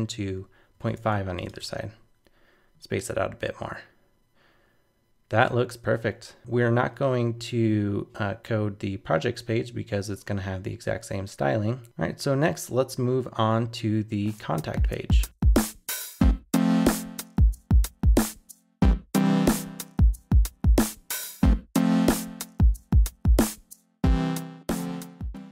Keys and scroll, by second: 0.7 super+s, 0.9 super+Tab, 1.6 super+r.